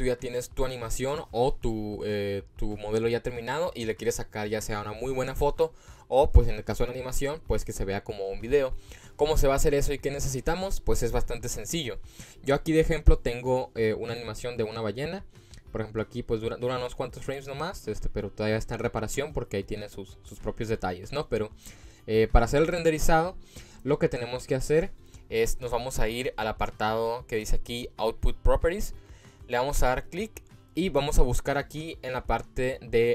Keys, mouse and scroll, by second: 14.7-16.2 drag, 17.3 click, 18.3 click, 19.0-21.2 drag, 22.4 click, 23.5 click, 24.3-24.7 drag, 28.9 click, 31.2-32.1 scroll down 3.